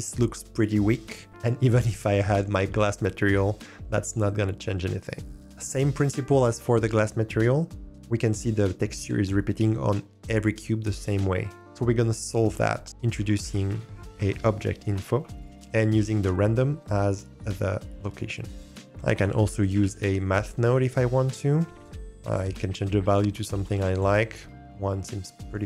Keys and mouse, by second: 13.1 shift+a, 16.6-18.5 drag, 18.7 shift+a, 18.7 BackSpace, 21.8 click, 23.1 click, 23.3 click.